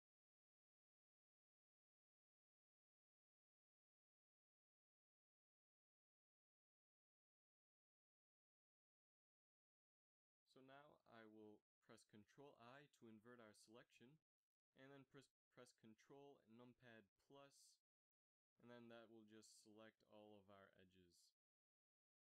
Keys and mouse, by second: 3.4 z, 3.7 z, 10.6 Tab, 12.8 ctrl+i, 19.7 click.